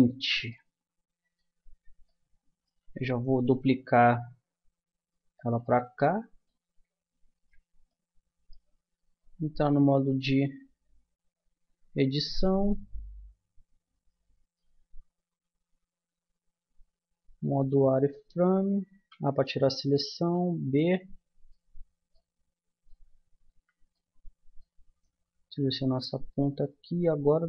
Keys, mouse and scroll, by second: 3.4 shift+d, 5.9-7.3 drag, 7.3-10.5 middle drag, 9.5 z, 10.5 z, 11.2-14.1 middle drag, 11.7 Tab, 17.4 z, 18.9 a, 20.2 b, 23.6 z, 24.3-27.4 middle drag.